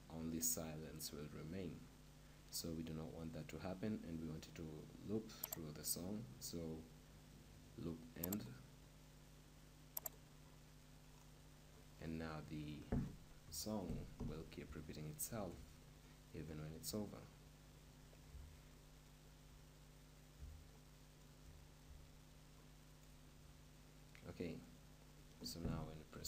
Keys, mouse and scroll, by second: 5.6-7.4 drag, 10.6-11.9 drag, 11.7-13.6 middle drag, 13.3 KP_0, 14.2-20.4 middle drag, 22.0-24.4 shift+middle drag, 26.2 p.